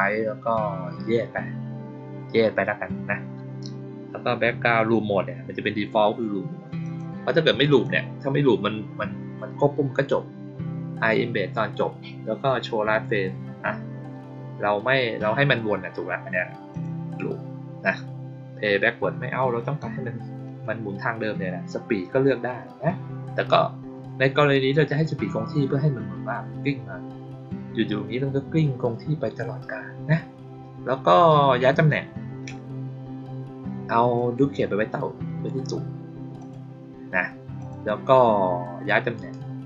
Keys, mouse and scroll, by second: 6.7 click, 7.6 click, 16.6 click, 34.1-35.4 drag, 36.3 click, 37.5 click, 39.1 right click.